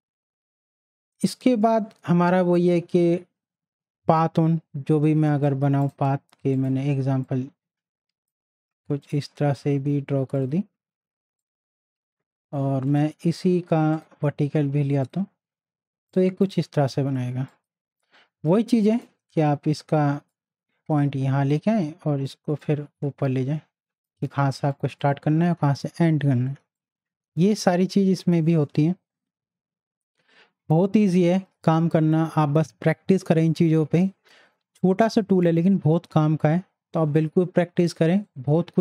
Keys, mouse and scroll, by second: 5.2 right click, 5.8-9.0 drag, 12.9 right click, 13.9-33.3 drag, 38.2 click, 38.2 right click.